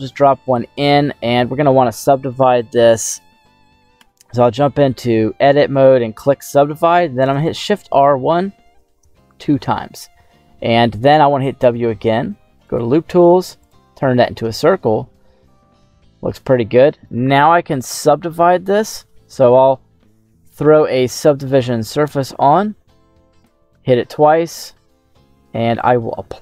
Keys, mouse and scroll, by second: 1.6 w, 3.6 right click, 3.9 Tab, 4.7 w, 7.8 shift+r, 8.6 shift+r, 11.2 w, 14.5-15.3 scroll down 2, 15.3-16.7 middle drag, 19.0 Tab, 19.8 Tab, 20.6-22.2 drag, 23.3 click, 24.4 Tab, 25.7 click, 26.1 Tab.